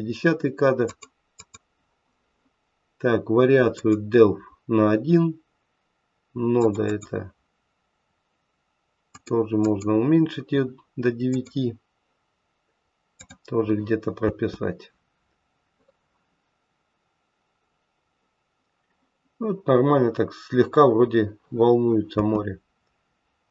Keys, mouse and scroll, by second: 0.8 click, 1.3 click, 3.7 click, 6.6 click, 6.8 click, 9.0 click, 9.6 click, 14.1 space, 19.5-19.9 scroll up 3, 19.9-20.7 scroll down 1, 22.1 space.